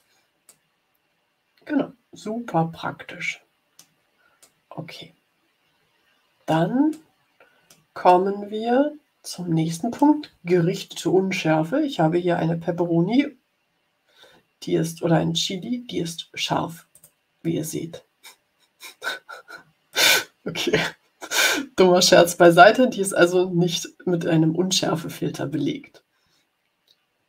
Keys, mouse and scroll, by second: 0.4 click, 0.8 middle click, 1.0 click, 1.2 click, 1.4 click, 2.3 middle click, 2.7-3.9 drag, 4.5-6.6 drag, 6.8 click, 8.0-10.1 drag, 16.8 click, 19.9 click, 21.3-22.6 drag.